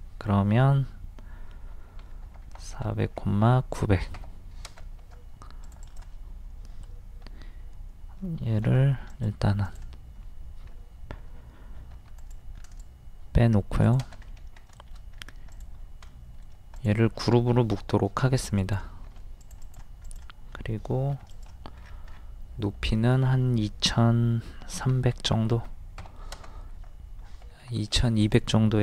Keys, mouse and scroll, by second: 2.0 KP_4, 3.2 KP_9, 4.7 space, 5.6 click, 8.7 m, 9.1-10.7 drag, 12.0 a, 12.2 click, 14.3 scroll up 1, 15.5 click, 16.1 middle click, 16.8 click, 18.7-20.0 drag, 21.1 d, 21.3 click, 21.8-22.1 scroll down 1, 24.9 KP_2, 25.4 KP_0, 27.6 ctrl+z, 28.2 click.